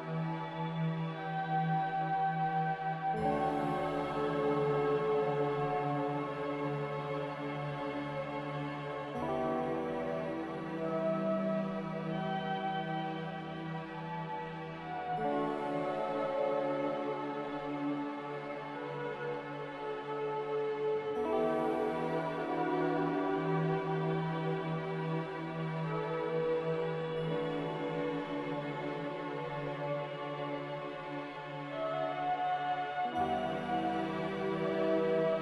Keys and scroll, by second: 2.2 z, 4.1-4.9 typing, 9.4 5, 11.9 5, 14.2 5, 18.0 c, 18.5 c, 21.3 z, 22.4-23.3 typing, 30.6 z, 32.0-32.8 typing.